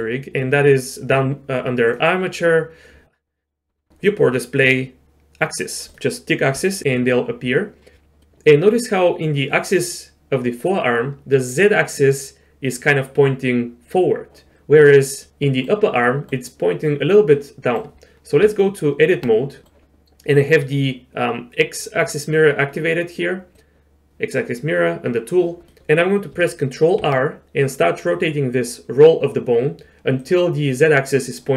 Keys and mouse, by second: 1.9 click, 6.6-8.2 drag, 8.2 middle click, 14.9-15.3 drag, 15.3 middle click, 16.1 middle click, 17.4 middle click, 18.4 Tab, 23.5-24.2 drag, 25.7 middle click, 27.1 ctrl+r.